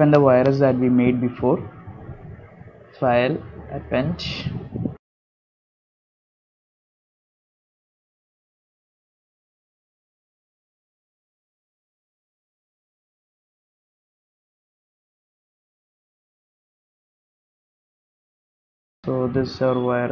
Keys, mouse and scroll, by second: 0.1 middle click, 0.7 shift+middle click, 4.6 click.